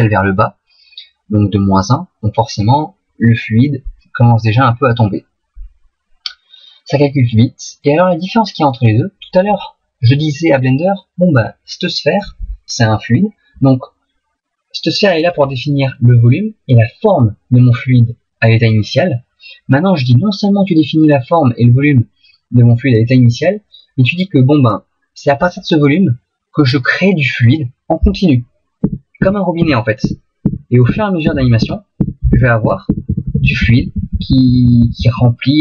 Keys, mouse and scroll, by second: 8.2 middle click, 28.8 Right, 29.2 Right, 29.6 Right, 30.0 Right, 30.5 Right, 30.9 Right, 31.3 Right, 31.6 Right, 32.0 Right, 32.3 Right, 32.7 Right, 32.9 Right, 33.1 Right, 33.3 Right, 33.5 Right, 33.6 Right, 33.8 Right, 34.0 Right, 34.1 Right, 34.3 Right, 34.5 Right, 34.7 Right, 34.8 Right, 35.0 Right, 35.1 Right.